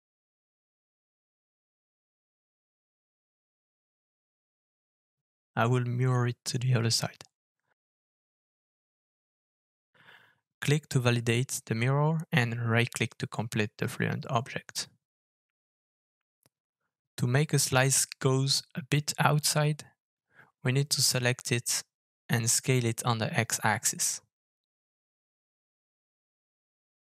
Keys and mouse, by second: 14.4-15.2 middle drag, 15.7-16.2 middle drag, 17.0-17.3 middle drag, 18.7 s, 23.9-24.6 shift+middle drag, 26.5-27.1 middle drag.